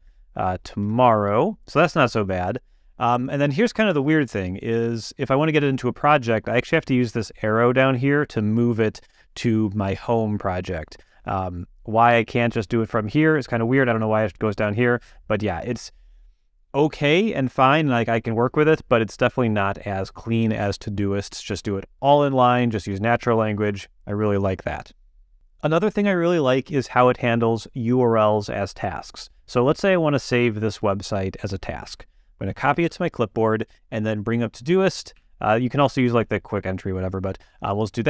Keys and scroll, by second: 0.4 Down, 0.8 Return, 31.8 shift+super+c, 32.8 shift+super+m, 35.1 q.